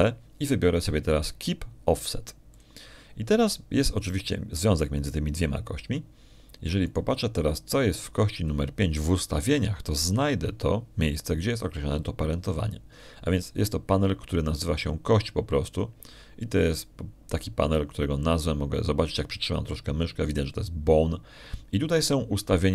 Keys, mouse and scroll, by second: 0.0 shift+right click, 1.4 ctrl+p, 4.4 click, 8.7 right click, 17.6 click.